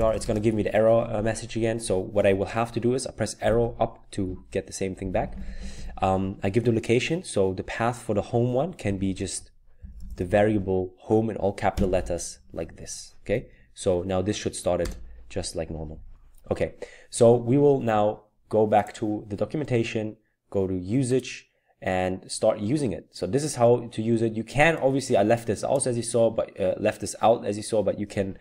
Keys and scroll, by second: 0.0-0.6 typing, 3.5 Up, 4.2-4.8 Left, 5.0 Left, 5.1 Left, 5.2 Left, 5.4 Left, 5.5 Left, 5.7 Left, 8.9-10.7 typing, 11.7 typing, 13.3-14.8 typing, 16.0-16.7 typing.